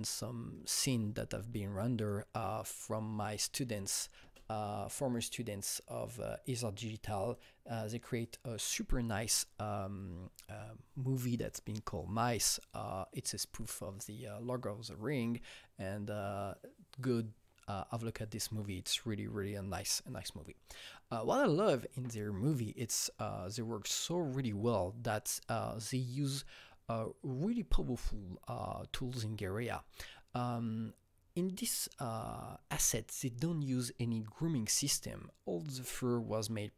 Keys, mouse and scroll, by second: 0.9 click, 1.9 click, 4.1 space, 6.1 click, 7.3 click, 8.2 click.